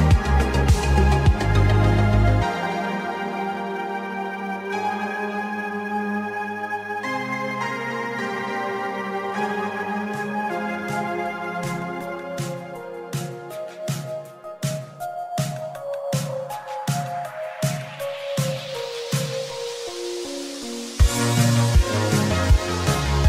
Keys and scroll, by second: 16.5 ctrl+d, 19.0 KP_1, 19.2 Return, 19.6 KP_2, 19.7 Return, 20.0 KP_5, 20.1 Return.